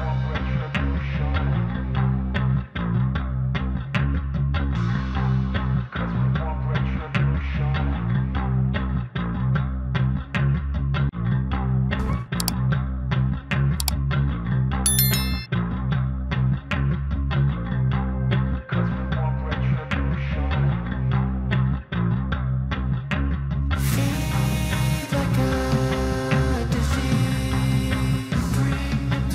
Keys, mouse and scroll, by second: 2.9 ctrl+Page_Down, 8.7 click, 13.8 right click, 14.4 click, 16.1 right click, 16.5 click, 20.0-22.8 drag, 22.8 ctrl+z, 24.1-28.0 drag, 28.0 right click.